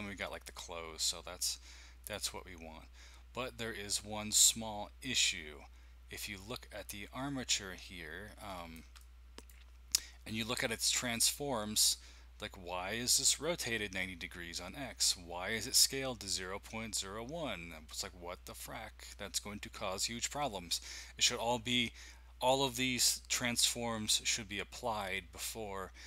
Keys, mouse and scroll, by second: 2.0 click, 8.1-8.7 scroll up 1, 8.7 shift+middle click, 9.2 middle click.